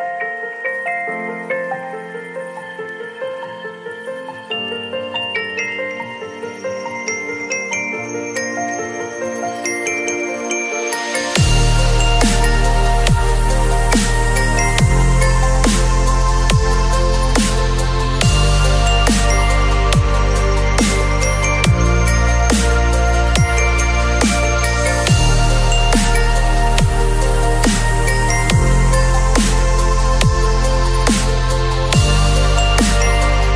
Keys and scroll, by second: 4.5 space, 8.6 space, 10.7 l, 15.8 ctrl+c, 16.2 ctrl+w, 16.6 v, 20.6 ctrl+v, 23.7 Delete, 25.5 ctrl+v, 26.5 ctrl+t.